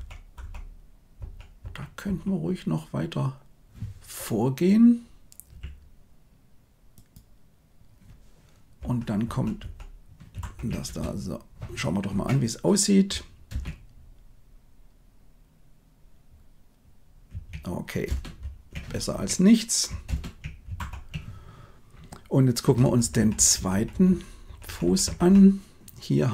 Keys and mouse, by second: 0.3 Left, 1.1 Right, 1.5 Right, 2.0 Right, 5.4 g, 8.7 Right, 9.1 Right, 9.5 Right, 10.3 shift+Left, 10.8 space, 13.4 shift+space, 18.0 space, 20.0 shift+space, 20.7 shift+Left, 22.6 Right, 22.7 Right, 22.9 Right, 23.1 Right, 23.3 Right, 23.5 Right, 23.6 Right, 23.8 Right, 24.0 Right, 24.6 Right, 24.7 Right, 25.0 Right.